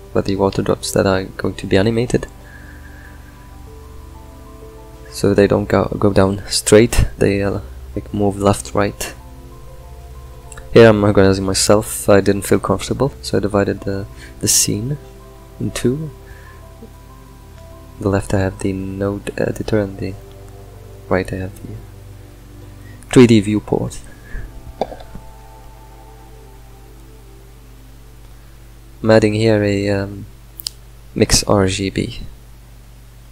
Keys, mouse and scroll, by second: 2.3 click, 2.4-7.6 right drag, 7.6-9.9 ctrl+middle drag, 9.9 click, 10.8-12.1 shift+middle drag, 12.1 click, 14.5 n, 15.3-33.3 drag.